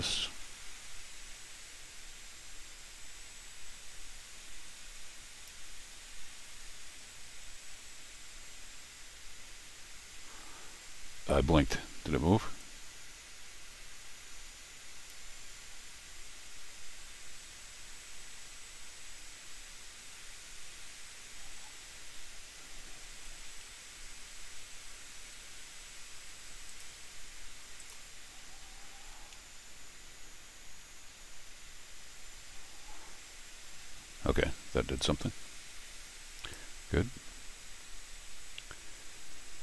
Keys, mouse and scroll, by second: 9.9 middle click, 12.6-15.1 drag, 23.0 ctrl+alt+r, 26.7 click, 27.8 click, 28.9 ctrl+alt+r, 35.0-36.5 drag.